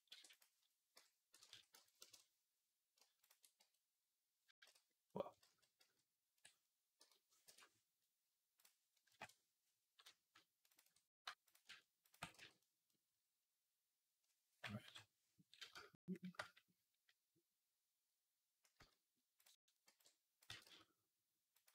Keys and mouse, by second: 0.0 e, 1.4 s, 3.4 f, 4.5 ctrl+z, 5.3 ctrl+z, 6.8 g, 8.5-10.8 drag, 10.8 middle click, 10.9 f, 11.3 click, 11.4 middle click, 11.5 ctrl+click, 12.0-14.7 middle drag, 12.2 f, 14.7 click, 14.7 KP_3, 15.6-18.6 shift+middle drag, 18.6 z, 19.7 b, 20.3 g.